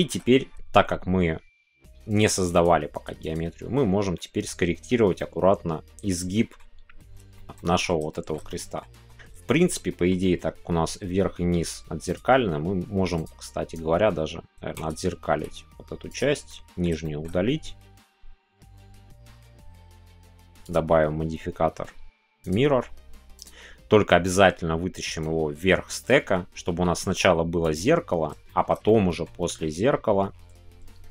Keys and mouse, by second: 0.3 middle click, 3.4 click, 4.2 middle click, 5.1-6.5 middle drag, 7.4 shift+middle click, 7.5 middle click, 8.1 shift+middle click, 8.4-8.8 middle drag, 8.9 Tab, 9.4 shift+middle click, 9.8 middle click, 14.8-16.4 drag, 16.4 middle click, 17.0 shift+middle click, 22.5-23.5 drag, 27.6 click, 28.5 shift+middle click.